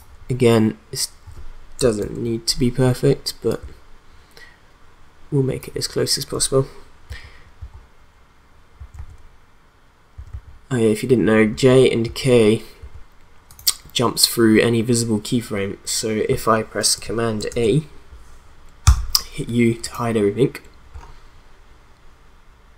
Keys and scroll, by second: 2.0 ctrl+Right, 7.1 j, 8.8 k, 10.1 j, 11.5 k, 12.8 j, 17.5 ctrl+a, 18.8 u.